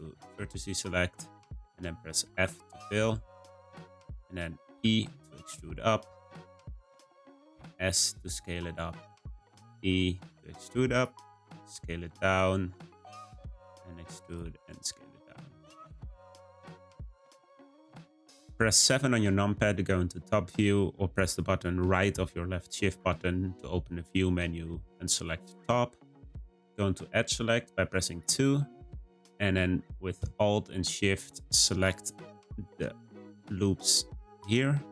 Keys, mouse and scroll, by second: 0.5-2.2 shift+middle drag, 2.2 f, 2.9-3.5 scroll down 1, 3.5-4.7 middle drag, 4.7 e, 7.5 s, 9.4 e, 11.2 s, 13.4 e, 14.4 s, 23.0 `, 26.2-27.9 scroll up 1, 28.0 click, 28.7-29.4 scroll up 2, 29.4-31.8 shift+middle drag, 31.8 click, 31.9 click, 33.0 shift+click, 33.2 shift+click, 34.3 shift+click, 34.4 shift+click.